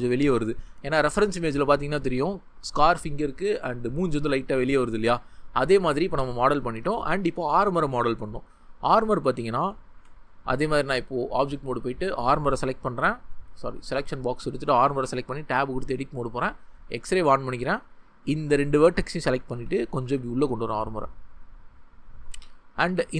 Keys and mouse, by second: 9.6 Tab, 11.6 click, 12.4 click, 15.0 Tab, 16.8 click, 19.5 g, 21.7 click.